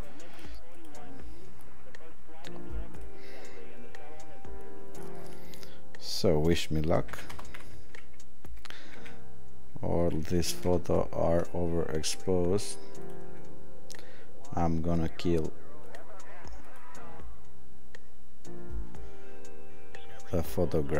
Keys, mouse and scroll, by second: 0.3 click, 0.9 click, 6.0 click, 7.1 click, 9.0 click.